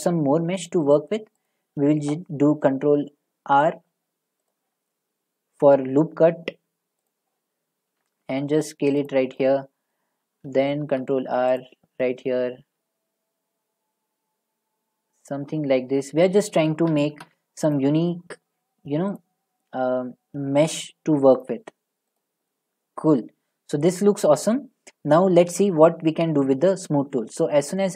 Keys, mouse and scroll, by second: 0.7 click, 1.5 click, 4.5 click, 7.1 click, 7.9 s, 9.1 click, 9.9 middle click, 10.8 ctrl+r, 11.6 click, 12.6 s, 15.3 click, 16.3 middle click, 17.0 ctrl+r, 17.8 click, 19.2 click, 19.9 s, 21.4 middle click, 25.2-26.5 middle drag.